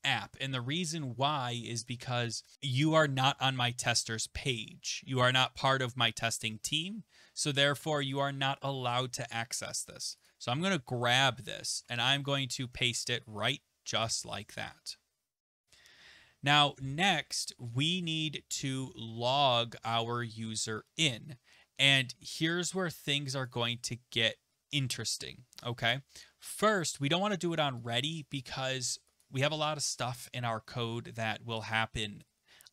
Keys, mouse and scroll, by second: 10.1 click, 10.3 click, 11.2 ctrl+c, 11.8 alt+Tab, 12.6 ctrl+v, 14.0 ;, 18.8-22.4 scroll, 23.4 click, 24.9 click, 26.6 click, 28.4 click, 29.2 click.